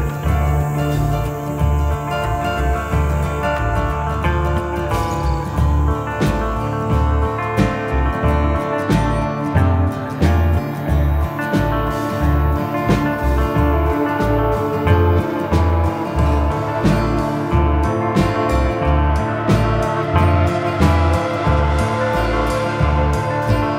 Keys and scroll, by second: 4.2 Escape, 14.4-16.4 typing, 15.5 Delete.